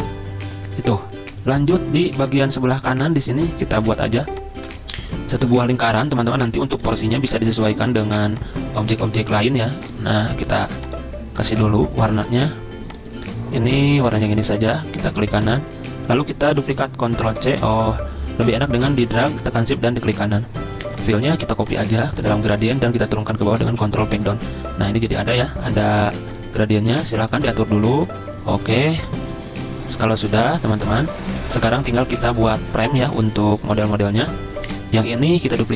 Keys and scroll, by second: 2.0 z, 5.8 c, 17.3 ctrl+c, 23.8 ctrl+Page_Down.